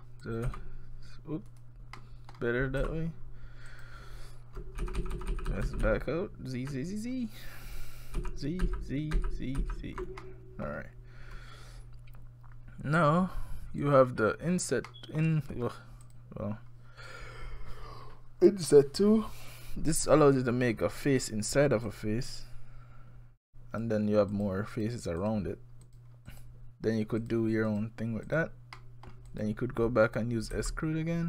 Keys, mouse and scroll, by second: 0.2 click, 0.5 e, 2.0 middle click, 2.4 scroll down 1, 2.8 e, 4.8-5.7 ctrl+z, 5.8-6.7 ctrl+z, 8.2 ctrl+z, 8.6 ctrl+z, 9.2 ctrl+z, 9.6 ctrl+z, 10.2 middle click, 12.3-13.8 scroll up 1, 13.8 click, 14.9 middle click, 15.4-16.0 scroll up 5, 16.0 click, 21.9 click, 24.3 click, 24.7 click, 25.2 click, 25.8 click, 26.3 click, 27.2 click, 27.7 click, 28.3 click, 28.8 middle click, 29.3 click, 30.5 e.